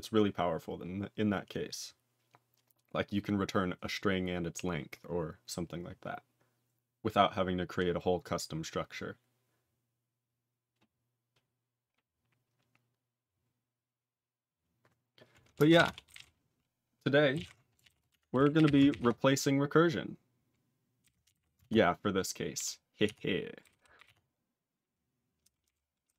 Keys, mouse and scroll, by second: 15.7 ctrl+space, 15.7 ctrl+a, 16.0 ctrl+n, 16.1 ctrl+g, 16.1 ctrl+e.